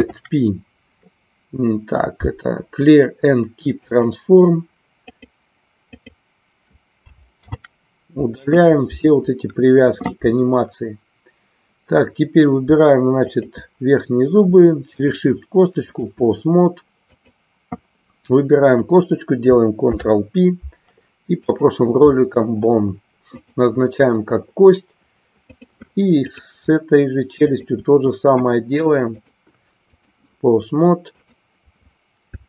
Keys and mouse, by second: 5.0 click, 5.9 click, 13.3 shift+click, 15.1-16.2 drag, 17.1 click, 23.5-25.8 drag, 26.3 click, 27.5 shift+click, 29.3-30.3 drag.